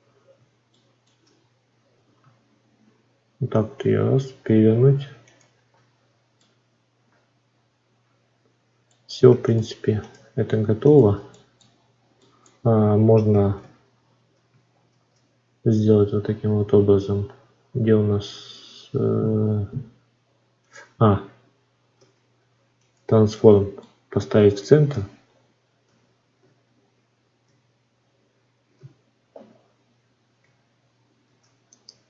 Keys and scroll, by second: 13.5 shift+a, 14.8 shift+s, 21.9 ctrl+a, 31.1 shift+d.